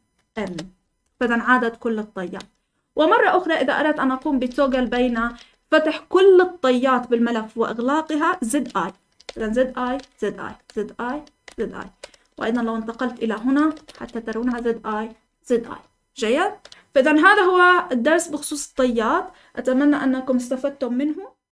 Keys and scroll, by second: 0.3-5.6 typing, 1.0 Escape, 8.9-15.7 typing.